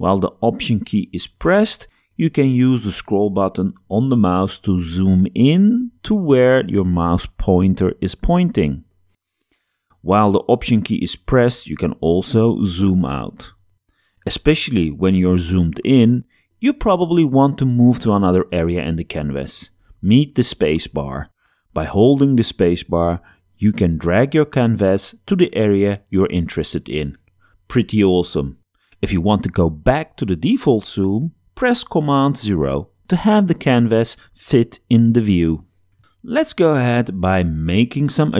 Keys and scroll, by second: 20.2 space, 27.1 alt+space, 28.0 space, 32.2 super+0.